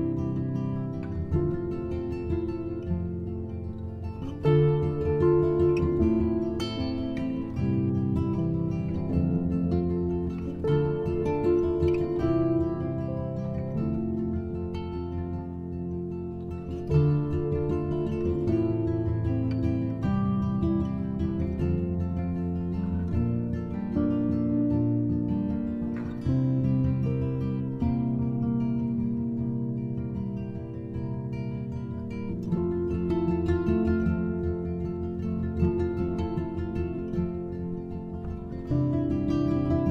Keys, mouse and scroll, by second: 6.8 click, 9.1-9.8 shift+middle drag, 9.8-10.8 scroll up 1, 10.8-11.3 scroll down 8, 12.0 click, 13.1 shift+a, 18.2 shift+a, 23.2-24.7 scroll up 6, 24.7 middle click, 25.3 shift+a, 31.8-33.5 drag, 33.5-33.8 scroll down 2, 34.2 click, 35.1 shift+d, 37.8 click.